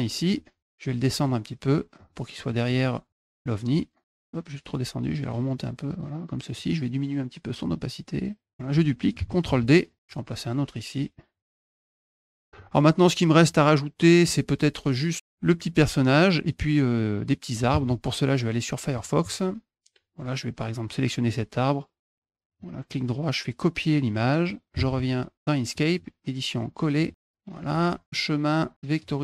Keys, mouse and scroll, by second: 1.0 click, 1.4 click, 1.8 click, 2.2 click, 2.5 click, 2.9 click, 3.1 click, 3.3 click, 5.0 click, 5.8 click, 7.4-8.5 drag, 9.4 d, 9.7 click, 11.1 click, 11.5 click, 11.5 click, 11.6 click, 11.7 click, 11.9 click, 12.3 click, 12.3 middle click, 13.3 middle click, 17.5 alt+Tab, 18.8 alt+click, 22.0 scroll down 1, 22.3 right click, 23.9 click, 24.7 Tab, 25.3 middle click, 25.8 right click, 26.9 click, 28.8 alt+click.